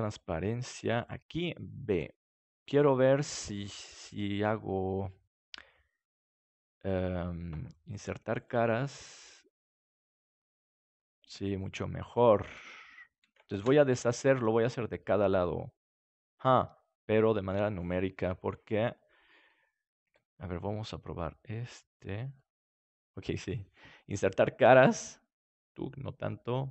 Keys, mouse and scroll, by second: 0.9-2.6 drag, 1.9 b, 2.7 click, 2.9 middle click, 3.8-5.1 middle drag, 6.3-10.2 drag, 10.3 Tab, 10.9 middle click, 13.6 ctrl+z, 14.1 Tab, 17.4 a, 18.2 KP_3, 20.0 b, 22.3 middle click, 24.1-25.8 drag, 25.9 click.